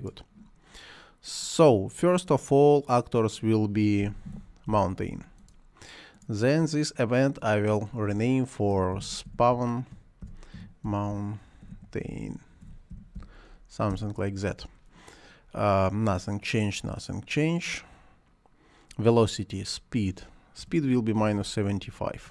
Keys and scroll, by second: 3.8-5.2 typing, 8.4-13.6 typing, 13.9 Return, 20.6 -, 21.3 7, 22.1 Return.